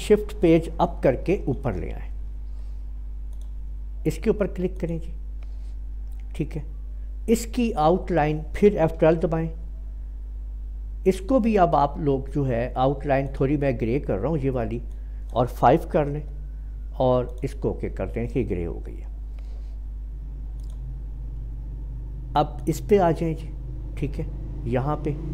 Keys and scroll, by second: 1.4 5, 9.1 F12, 16.1 5.